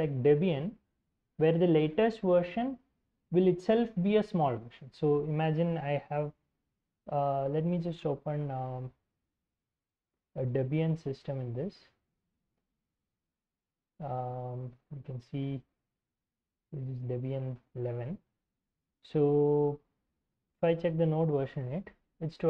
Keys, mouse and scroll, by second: 8.5-16.5 typing, 18.8 ctrl+l, 19.9-21.6 typing.